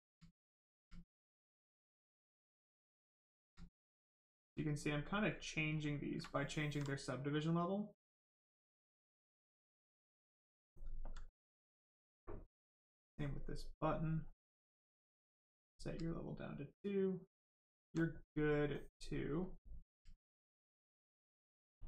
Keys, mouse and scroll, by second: 0.4 alt+click, 0.9 alt+right click, 2.1 click, 2.2 click, 3.8 alt+click, 4.3 alt+right click, 5.2 ctrl+right click, 5.7 ctrl+click, 6.2 alt+click, 6.2 alt+right click, 7.2 click, 7.2 click, 11.8 alt+click, 14.2 click, 16.8 alt+click, 20.0 alt+right click, 21.7 alt+click.